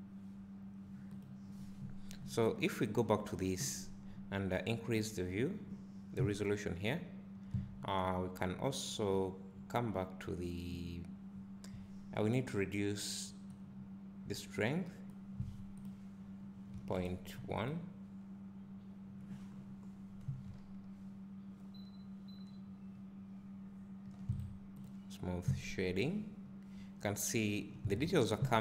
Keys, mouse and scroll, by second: 2.0-2.9 scroll up 1, 5.3 click, 6.2 `, 13.9-17.8 drag, 19.5-20.5 scroll down 1, 20.5 `, 25.0-28.6 right drag, 25.5 `.